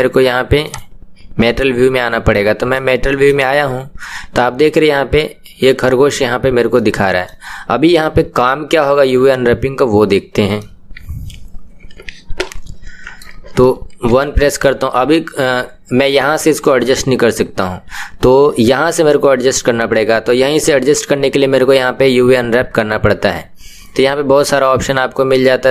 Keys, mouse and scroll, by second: 0.9 click, 2.7 middle click, 3.5-3.9 scroll up 1, 4.0-6.3 middle drag, 6.3-6.7 scroll down 1, 6.7-14.1 middle drag, 14.1 KP_1.